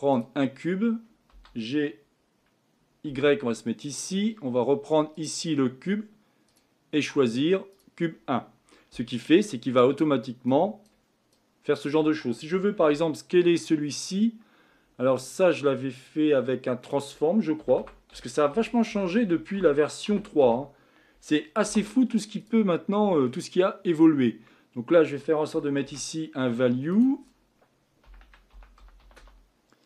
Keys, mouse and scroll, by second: 0.2 shift+a, 1.4 g, 5.2 click, 7.8-22.4 drag.